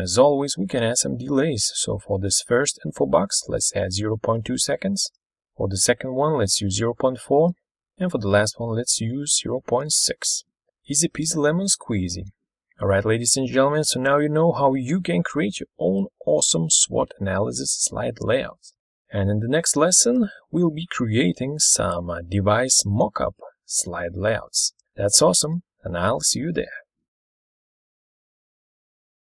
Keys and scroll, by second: 4.6-5.4 typing, 6.6-7.6 typing, 7.6 Return, 9.3-10.2 typing.